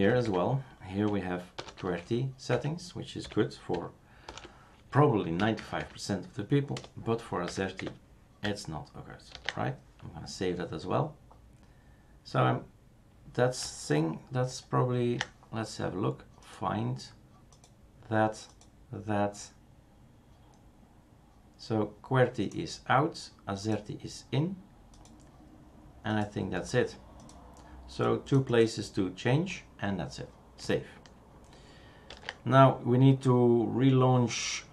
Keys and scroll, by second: 0.1 Down, 0.2 Down, 1.5 #, 2.5 Down, 3.2 Left, 4.2 #, 5.3 Down, 5.6 Down, 5.8 Down, 6.7 BackSpace, 7.4 Down, 7.8 Delete, 9.3 ctrl+s, 32.1 ctrl+s.